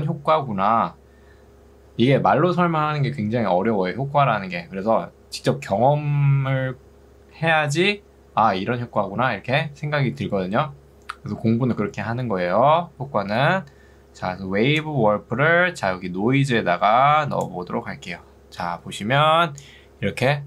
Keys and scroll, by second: 19.4 ctrl+2.